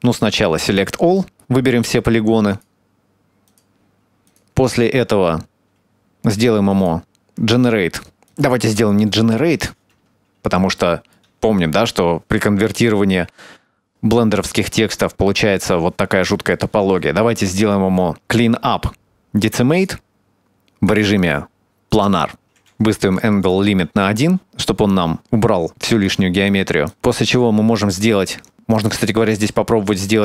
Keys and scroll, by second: 9.9 Tab.